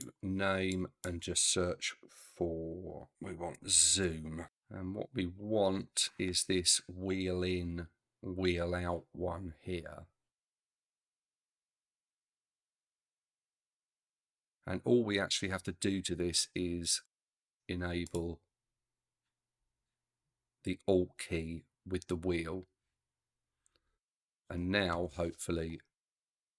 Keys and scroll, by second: 3.1 z, 3.4 o, 3.9 m.